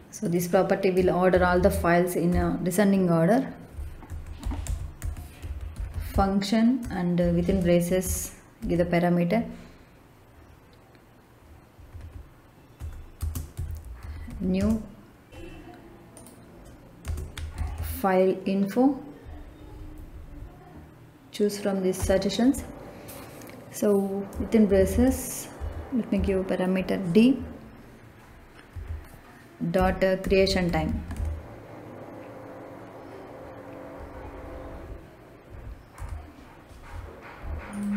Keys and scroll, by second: 1.2 shift+9, 1.5 shift+0, 2.2 Left, 4.0-6.0 typing, 7.1 shift+9, 7.4 shift+0, 7.9 Left, 8.5 d, 11.7 Right, 12.7 Left, 13.1-14.5 typing, 17.0 space, 17.3 f, 17.5 i, 17.7 l, 19.2 Down, 21.9 Return, 24.6 shift+9, 24.8 shift+0, 25.5 Left, 26.1 d, 28.6 Right, 29.7-31.1 typing, 33.8 Down, 35.4 Up, 35.9 Return.